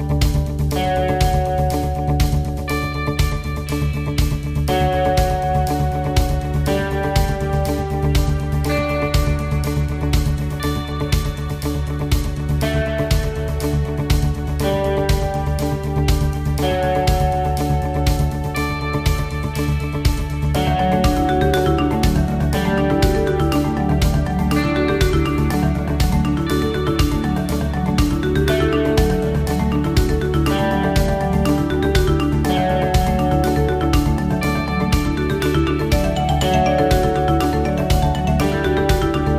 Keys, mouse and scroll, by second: 37.7 click, 37.7-39.1 scroll down 5.